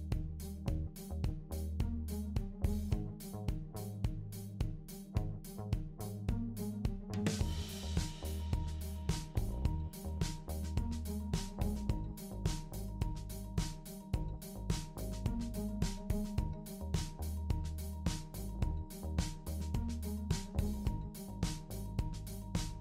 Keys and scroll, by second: 3.8 Right, 4.0 Right, 12.9 ctrl+d, 14.3 super+d.